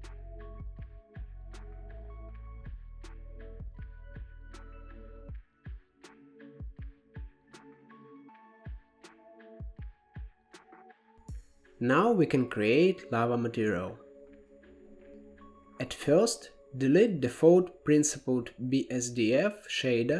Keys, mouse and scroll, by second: 0.2 Tab, 1.8 click, 3.1-4.1 shift+middle drag, 4.1 ctrl+b, 6.3-6.7 scroll up 3, 6.7-8.0 shift+middle drag, 8.0 ctrl+b, 10.0 scroll up 2, 10.7-12.1 shift+middle drag, 12.1-14.1 drag, 14.1-14.5 scroll down 4, 14.5-15.6 middle drag, 15.6 click, 16.6 x, 17.4-17.9 scroll up 3, 17.9-19.1 middle drag, 19.1 shift+a.